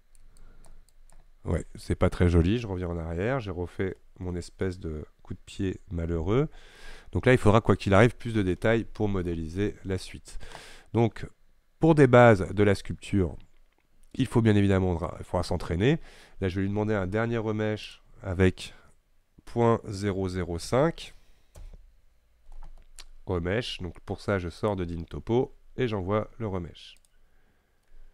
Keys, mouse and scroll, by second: 2.6 ctrl+z, 3.0 ctrl+z, 3.4 ctrl+z, 3.9 ctrl+z, 4.7-8.1 middle drag, 8.1-8.7 scroll down 4, 8.7-16.2 shift+middle drag, 21.7 KP_0, 27.8 click.